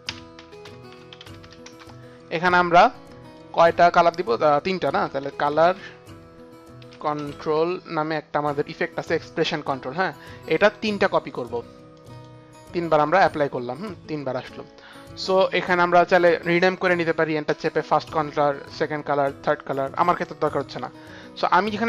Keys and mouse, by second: 0.0-1.8 typing, 3.3 click, 4.7-7.9 typing, 4.9 click, 5.7 click, 6.7 click, 9.6-10.9 typing, 10.4 click, 11.2 click, 11.4 click, 11.9 click, 12.1 click, 13.0 click, 15.5 click, 17.4 Return, 19.6 Return, 19.9 Return, 19.9 click.